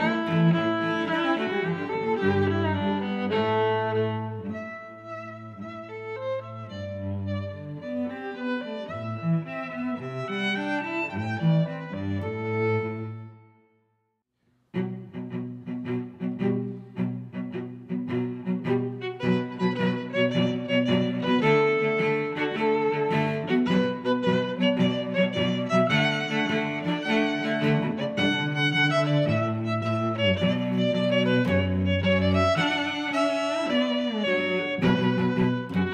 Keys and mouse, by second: 1.6 click, 1.7 click, 2.8 click, 3.1 click, 4.7 g, 7.1 g, 7.1 y, 7.3 click, 7.6 Tab, 8.4 middle click, 9.1 middle click, 9.8 middle click, 10.2 click, 12.7 middle click, 14.1 click, 14.4 click, 15.0 shift+super+Tab, 15.9 click, 16.6 g, 16.9 z, 17.8 click, 18.1 s, 18.2 z, 21.5 click, 21.9 s, 22.3 k, 24.3 click, 24.8 g, 25.1 x, 25.1 z, 26.2 click, 26.9 click, 27.6 s, 28.0 y, 31.2 click, 32.1 middle click, 35.3 Tab.